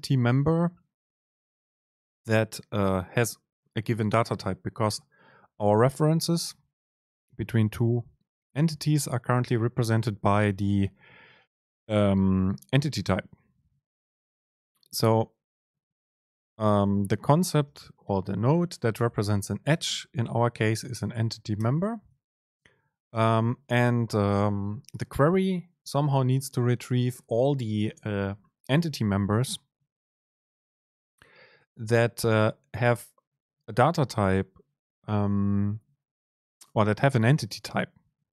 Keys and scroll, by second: 16.5 super+space.